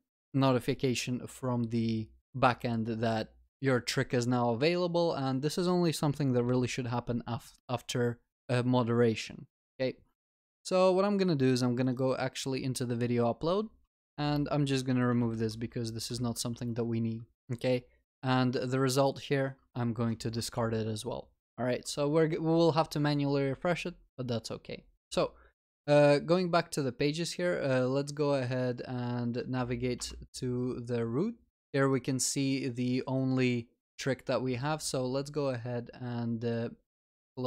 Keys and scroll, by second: 15.5 ctrl+y, 16.6 ctrl+s, 20.1 Delete, 20.5 ctrl+s.